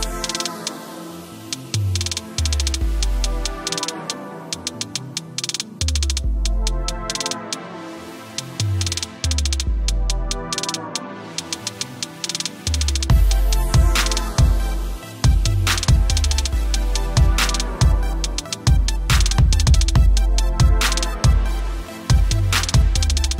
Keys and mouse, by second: 1.1 click, 2.2 alt+click, 2.6 click, 4.2 Return, 5.1 click, 5.8 a, 6.1 click, 8.0 right click, 10.1 click, 10.9 ctrl+t, 11.9 click, 12.6 click, 13.8 click, 14.3 Return, 15.2 click.